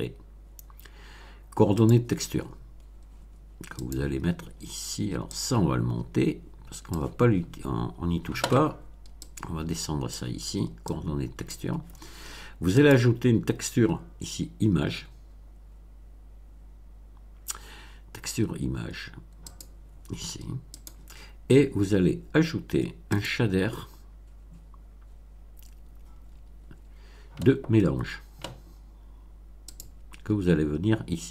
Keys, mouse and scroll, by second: 1.8 click, 3.7 click, 5.2-7.1 drag, 9.2-10.3 drag, 10.8-11.6 drag, 12.7 click, 19.5 click, 20.7 click, 23.0 click, 29.7 click.